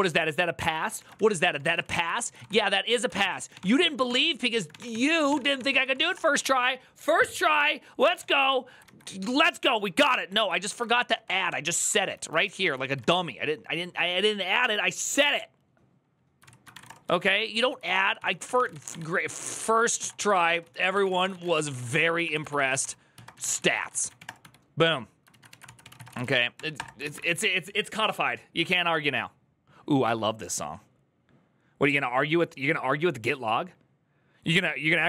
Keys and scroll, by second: 0.6 ctrl+a, 0.8-6.2 typing, 0.9 ctrl+c, 7.9 typing, 8.0 Return, 8.2 alt+[, 10.2 alt+{, 10.6 ctrl+d, 10.7 ctrl+d, 11.2 ctrl+d, 11.9-13.3 typing, 16.2-27.3 typing.